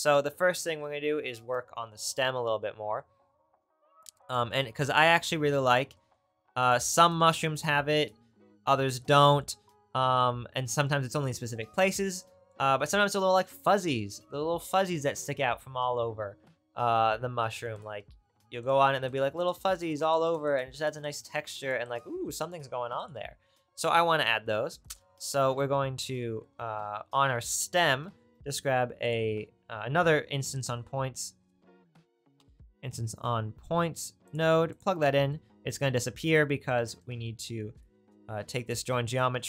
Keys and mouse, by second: 6.8 click, 18.7 middle click, 28.2 shift+a, 34.8-37.0 middle drag, 37.9-39.4 drag.